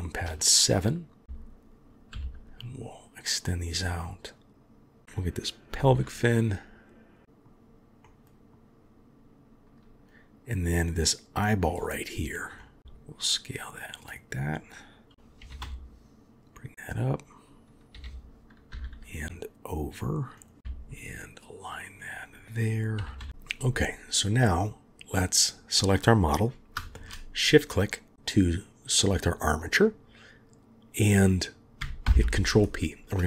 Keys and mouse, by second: 0.4 shift+middle click, 1.2 g, 5.0-7.2 drag, 5.7 g, 7.2 shift+middle drag, 8.0 shift+click, 10.9-11.4 drag, 12.6 middle click, 12.8 s, 15.4 g, 17.9 g, 20.6 KP_3, 20.6 g, 23.0 g, 24.4 click, 27.0 shift+click, 32.0 ctrl+p.